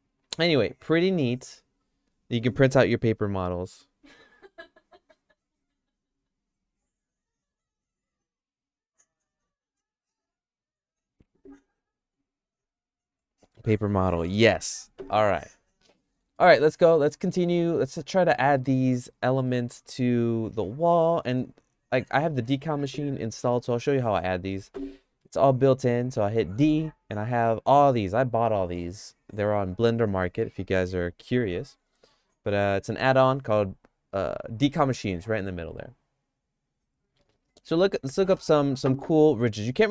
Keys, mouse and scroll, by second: 16.0 middle click, 16.6 shift+middle click, 17.8 Tab, 18.3 Tab, 19.5 middle click, 21.1 middle click, 21.5 shift+middle click, 23.5 middle click, 25.3 d.